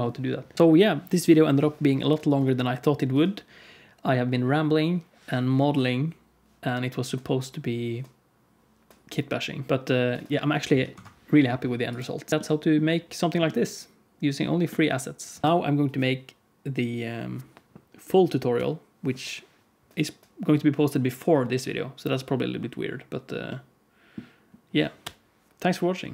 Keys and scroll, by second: 10.9 F11.